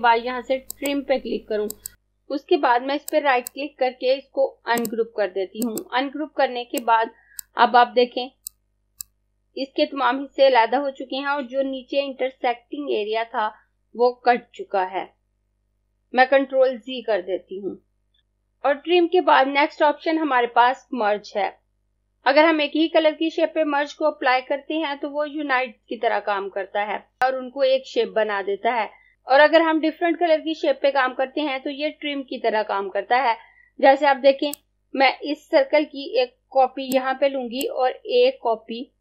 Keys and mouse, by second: 3.1 right click, 4.7 click, 16.9 ctrl+z, 18.1 ctrl+z, 34.5 click, 37.5 click.